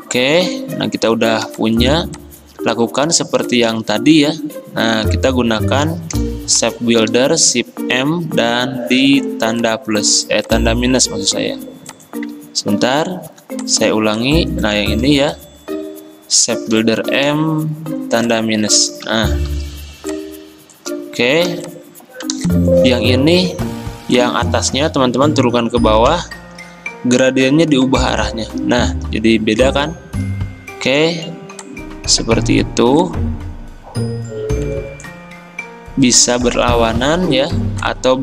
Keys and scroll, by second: 1.6 m, 14.8 ctrl+z, 16.8 m, 19.6 ctrl+z, 21.5 v, 24.8 ctrl+z, 26.1 ctrl+[, 30.9 g.